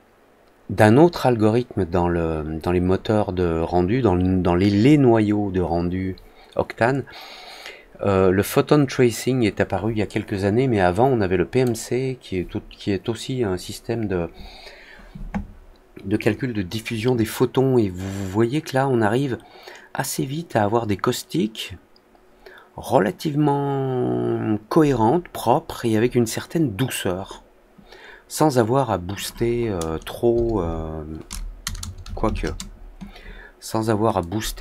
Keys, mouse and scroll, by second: 29.1 click, 34.1-34.6 drag.